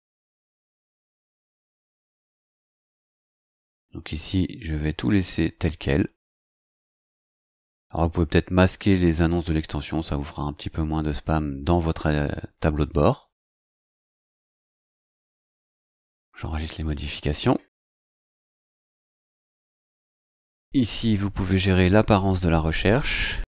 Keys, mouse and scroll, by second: 2.7 scroll down 2, 3.6-3.9 scroll down 2, 5.1 scroll down 2, 6.2 scroll down 2, 8.6 click, 15.2 scroll up 2, 15.2 scroll down 2, 15.8 click, 21.0 click.